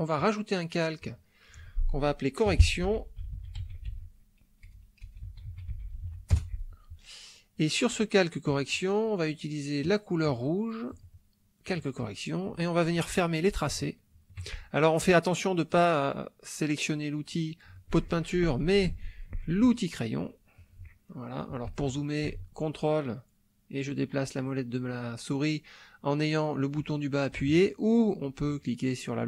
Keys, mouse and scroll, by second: 0.2 click, 1.0 click, 2.5-6.1 typing, 6.3 Return, 8.5 click, 9.8 click, 10.9 click, 13.8 shift+middle click, 18.9 shift+space, 19.6 shift+click, 21.0 ctrl+click, 21.0-22.2 ctrl+middle drag, 22.2 shift+click, 22.7-26.3 ctrl+shift+drag, 26.3-27.5 ctrl+middle drag, 28.5-29.2 drag.